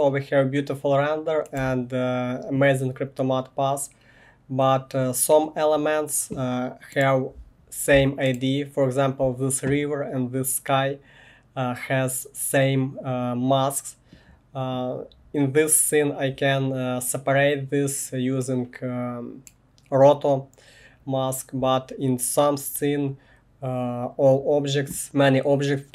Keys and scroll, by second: 1.6 1.